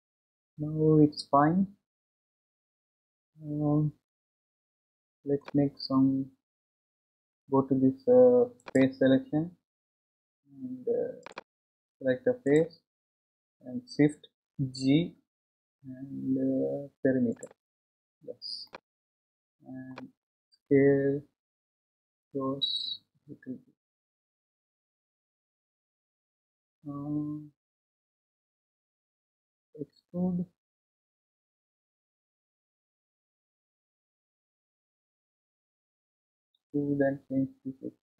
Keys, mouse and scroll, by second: 8.6-12.6 drag, 14.8 shift+g, 18.7-21.7 middle drag, 21.7 s, 30.2 e.